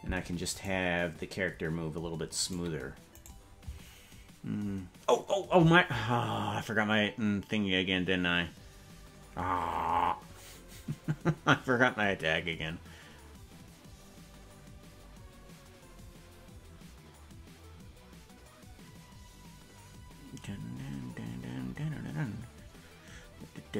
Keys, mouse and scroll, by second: 0.6 right click, 2.7 right click, 3.4 right click.